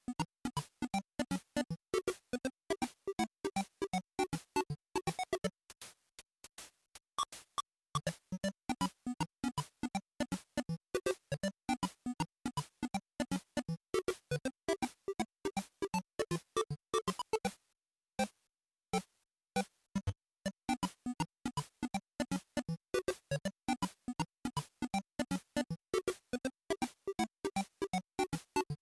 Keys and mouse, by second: 0.5 click, 4.4 click, 11.2 click, 15.6-22.7 drag, 28.1-28.8 drag.